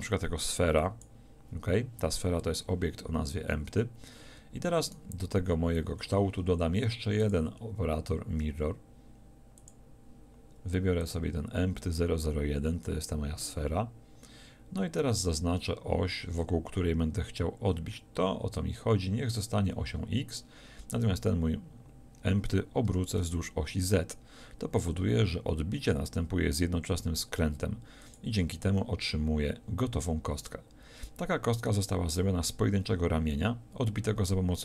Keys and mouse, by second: 4.9-9.7 drag, 11.0-19.2 drag, 20.9-22.9 drag, 22.9 r, 28.1-34.6 drag.